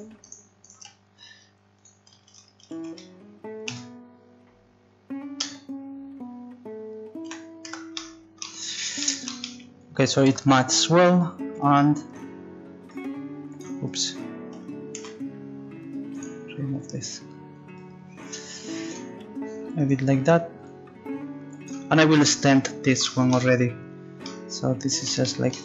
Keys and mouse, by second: 1.8-7.2 drag, 7.2 z, 7.7 Tab, 10.3 Tab, 12.1 right click, 12.9 click, 12.9 right click, 15.0 ctrl+z, 18.4 click, 19.8 right click, 20.6 click, 20.6 right click, 21.7-23.1 drag, 23.2 right click, 24.3 right click.